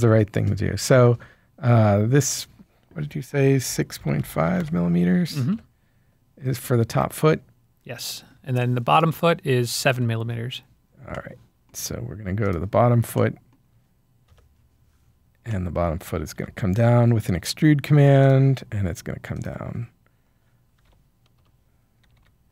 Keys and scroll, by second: 3.6-4.4 typing, 5.5 Return, 9.7-10.4 typing, 16.3 e, 20.7-22.5 typing.